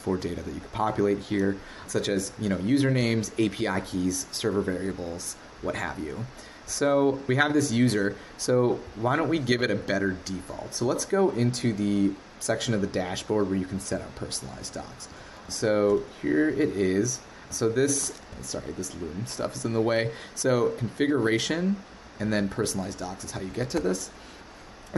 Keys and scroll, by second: 15.2 super+k, 23.7 alt+super+f.